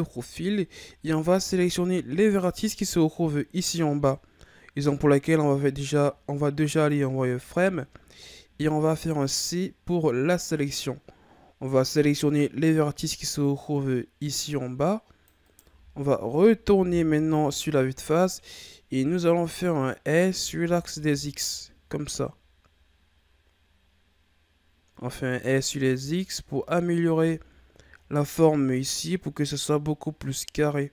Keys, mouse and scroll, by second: 0.0-0.8 shift+scroll down 9, 0.8-1.6 scroll up 5, 1.6 ctrl+scroll up 2, 4.8 z, 6.6 right click, 7.2 c, 15.6 z, 16.7 KP_1, 17.9-18.4 scroll down 4, 18.4-19.1 ctrl+scroll up 4, 19.6-20.1 scroll up 1, 20.2 s, 25.7 Tab, 26.3-27.1 scroll down 5, 27.1 a, 27.5-28.0 scroll down 1, 28.0-28.5 scroll up 5.